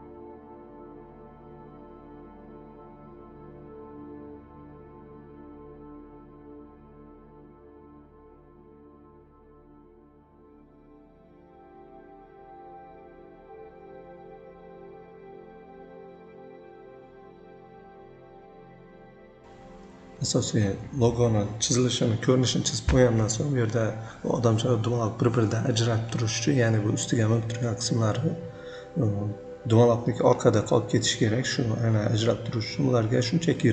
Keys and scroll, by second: 0.4 v, 1.0 shift+c, 1.7 c, 2.1 v, 3.9 v, 7.0 v, 11.7 v, 13.9 ctrl+z.